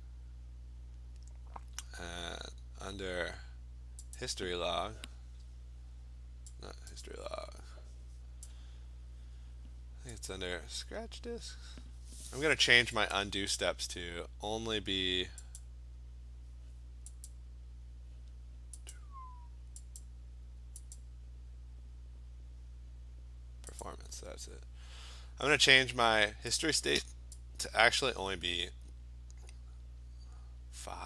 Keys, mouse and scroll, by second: 4.2 click, 6.9 click, 8.5 click, 10.3 click, 13.1 click, 15.6 click, 17.3 click, 18.9 click, 20.0 click, 21.0 click, 23.8 click, 26.7 click.